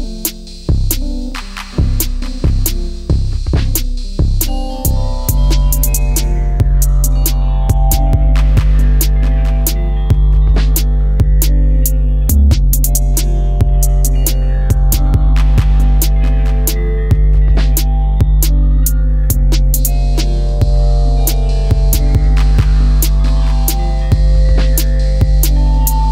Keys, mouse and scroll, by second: 14.3 ctrl++, 15.3 ctrl++, 19.5 space, 23.3 ctrl++.